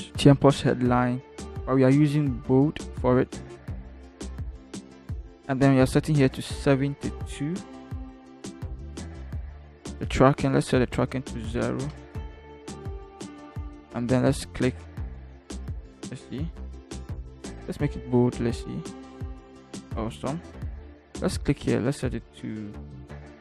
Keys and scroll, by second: 7.8 7, 8.5 2, 9.1 Return, 11.6 0, 12.5 Return.